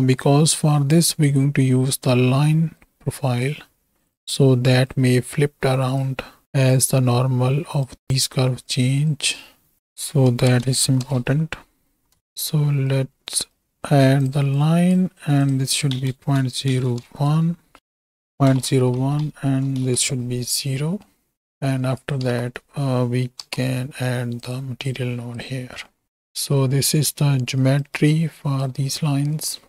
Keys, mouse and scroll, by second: 0.7 click, 2.9 click, 4.1-4.9 drag, 6.0 click, 6.5 right click, 6.8-7.9 right drag, 8.6 click, 9.1-12.2 drag, 12.3 click, 12.9-13.3 right drag, 13.6 right click, 14.2 drag, 14.5 click, 15.5-19.9 drag, 18.5 KP_0, 19.3 Tab, 20.9 middle click, 21.4 middle click, 22.1 shift+click, 22.6 shift+s, 23.4 shift+d, 24.5 click, 24.9 click, 25.8 middle click, 26.0-27.1 right drag, 27.7-28.7 right drag, 29.2 middle click.